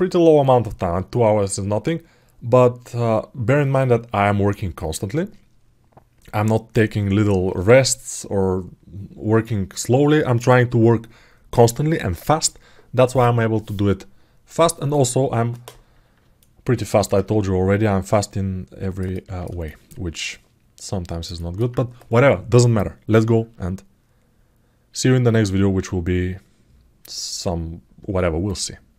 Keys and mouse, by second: 16.2 alt+middle click, 17.8-19.2 alt+middle drag, 19.4 alt+shift+middle click, 19.9-21.0 alt+middle drag, 21.1 ctrl+alt+middle click.